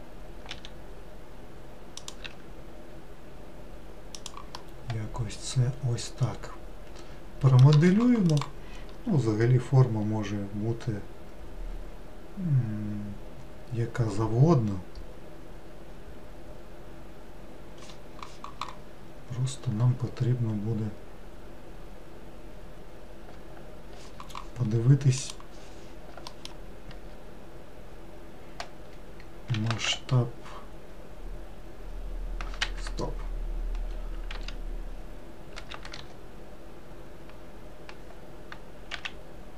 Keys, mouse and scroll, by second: 0.6 e, 2.3 s, 4.7-7.7 middle drag, 20.3-21.4 scroll down 1, 21.4-23.3 scroll down 1, 26.4 alt+middle click, 29.7 s, 34.4 a, 35.7 s.